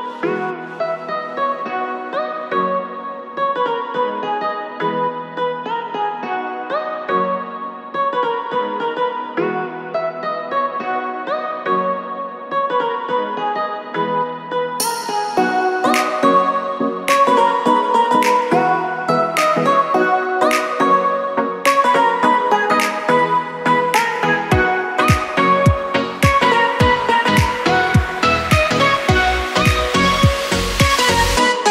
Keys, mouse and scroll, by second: 1.8 ctrl+click, 3.1 click, 6.5 click, 7.6 click, 9.4 KP_1, 11.8 click, 12.5-13.8 scroll down 2, 13.8 click, 19.3 click, 22.2 click, 23.4 click, 27.0 click, 27.7 click, 28.4-29.0 scroll up 1, 29.0 click, 29.0 scroll up 2.